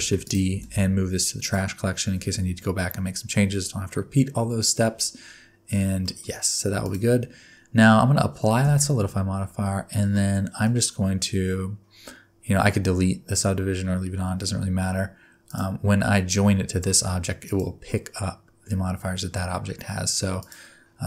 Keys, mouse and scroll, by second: 0.1 shift+d, 0.5 m, 6.0 middle click, 6.8 click, 8.6 ctrl+a, 10.1 middle click, 15.4 click, 17.4 shift+click, 20.4 click.